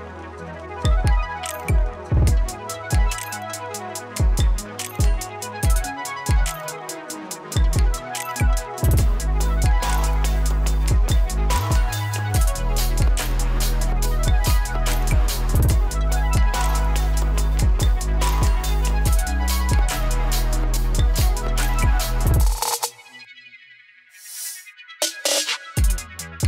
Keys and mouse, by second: 1.6 space, 4.5 space, 5.4-9.3 drag, 11.5 click, 12.1-13.5 typing, 14.7 click, 17.3-26.4 drag.